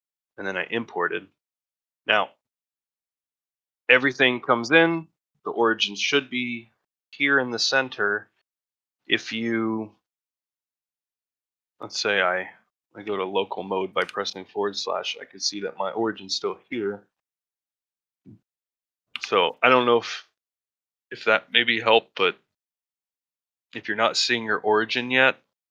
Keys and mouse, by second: 1.9 middle drag, 2.3-2.8 ctrl+middle drag, 3.0 shift+middle drag, 9.4 middle drag, 9.8 shift+middle drag, 11.2 middle drag, 11.5 shift+middle drag, 13.0 /, 14.2 middle drag, 14.6 shift+middle drag, 19.7 shift+middle drag.